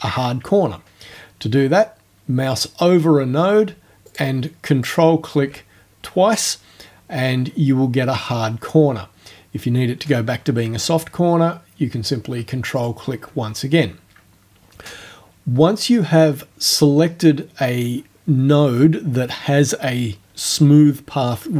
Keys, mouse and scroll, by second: 4.1 ctrl+click, 4.9 ctrl+click, 12.8 ctrl+click.